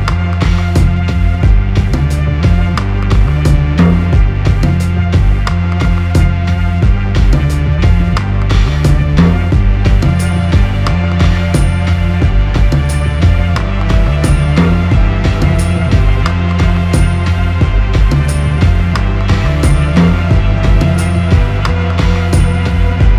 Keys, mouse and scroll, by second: 0.0 x, 0.2 middle click, 0.2 x, 1.4 Tab, 1.4 s, 3.0 g, 4.0 middle click, 4.5 shift+middle click, 4.8 middle click, 5.9 shift+a, 9.0 middle click, 10.2 KP_1, 12.1 shift+middle click, 14.1 g, 17.5-17.9 scroll up 3, 18.3-20.2 shift+scroll up 10, 20.4 shift+middle click, 21.6 g.